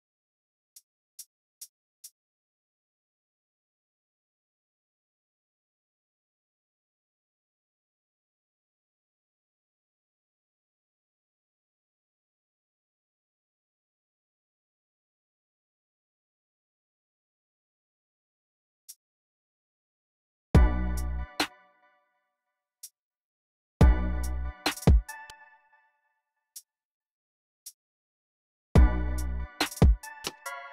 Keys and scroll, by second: 0.0-0.5 typing, 1.7-2.5 typing, 3.9 super+d, 6.4 s, 9.6 Tab, 9.7-12.7 typing, 15.3-16.9 typing, 20.3-22.2 typing, 23.6 space, 25.1-25.5 typing, 26.5 super+r, 27.7 alt+Left, 28.1 alt+Left, 28.5 space.